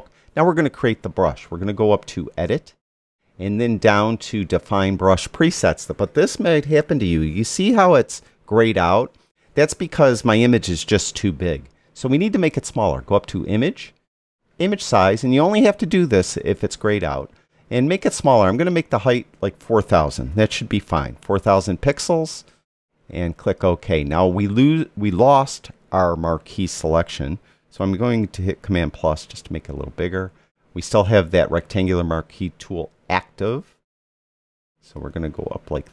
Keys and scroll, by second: 19.8 4, 20.2 0, 28.9 super+=.